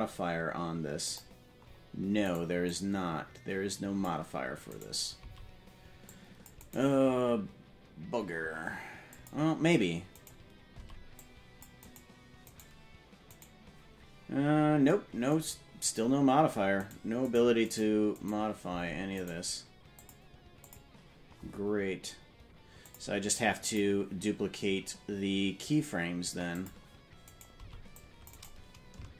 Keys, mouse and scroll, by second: 1.1 click, 2.2 right click, 2.7-4.2 drag, 4.7 right click, 5.1 c, 9.1 click, 10.1 right click, 10.7 c, 12.4 right click, 13.4 right click, 16.7 right click, 17.2 right click, 18.2 right click, 18.6 c, 19.9 click, 20.6 click, 22.8 click, 23.8 click, 26.6 click, 27.2 right click, 27.5 c.